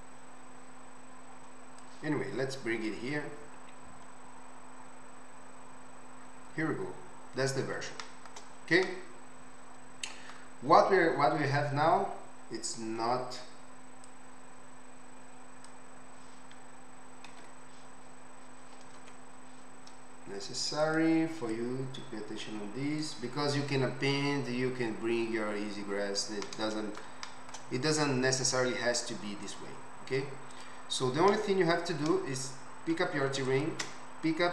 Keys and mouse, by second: 1.8-3.2 drag, 3.2-5.7 middle drag, 3.2 right click, 6.7-10.1 middle drag, 10.1-14.0 right drag, 14.0-15.7 middle drag, 15.7-20.8 right drag, 17.6 ctrl+z, 19.1 ctrl+z, 20.8 middle click, 20.9-21.5 right drag, 21.5-23.1 middle drag, 23.1-25.1 right drag, 25.1 middle click, 25.5 right click, 25.7-32.4 middle drag, 29.4 click, 29.4 right click, 30.5 click, 30.5 right click, 32.4-34.5 right drag, 33.5 shift+click, 33.5 shift+middle click.